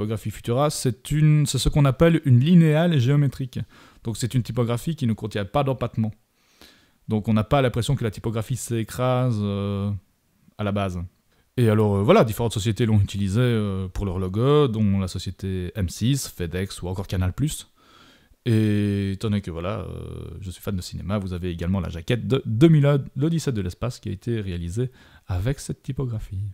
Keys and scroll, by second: 2.2 super+-, 16.3 super+-.